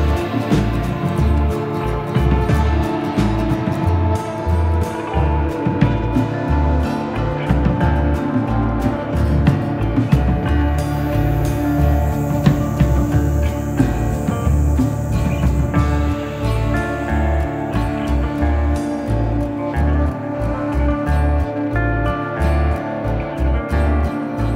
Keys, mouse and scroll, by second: 1.7 shift+d, 1.9 middle click, 3.8 click, 5.6 click, 9.1 click, 9.3 shift+f, 10.0 i, 10.2 a, 10.4 Return, 10.8 scroll up 1, 11.0 click, 11.6 n, 11.8 middle click, 12.4 click, 15.4 click, 18.5 click, 18.6 middle click, 19.8 click, 21.0 click.